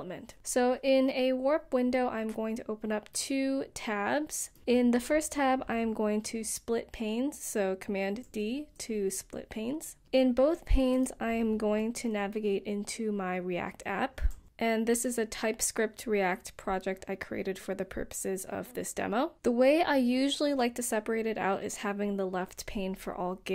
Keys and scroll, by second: 6.3 super+d, 11.2-17.6 typing, 15.1 Tab, 17.6 Return, 19.4 typing, 22.6 typing.